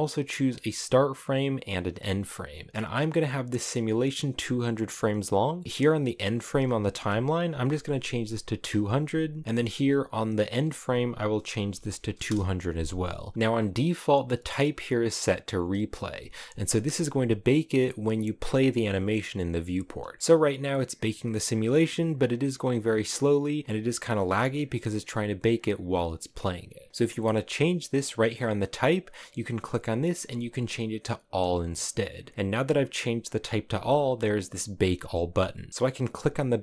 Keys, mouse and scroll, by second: 13.3 space, 18.2-19.3 drag, 19.3 space, 24.4-25.9 middle drag, 25.9 space.